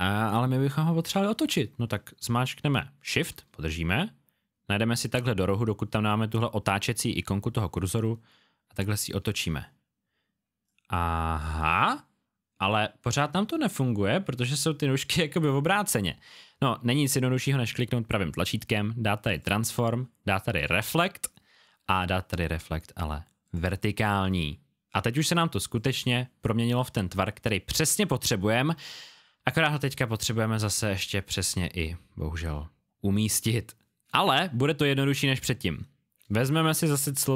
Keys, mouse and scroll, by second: 7.5 shift+click, 10.6 click, 17.6 right click, 19.3 click, 25.7 click, 35.6 alt+scroll down 1, 36.2 scroll down 1, 36.3 click, 37.2 click.